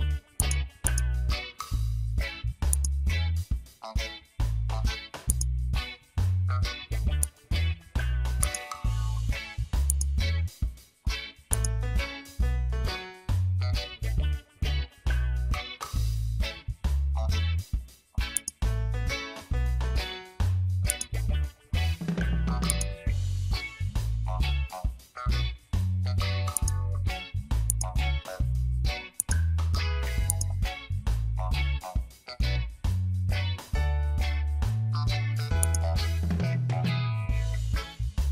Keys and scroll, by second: 34.8 ctrl+j.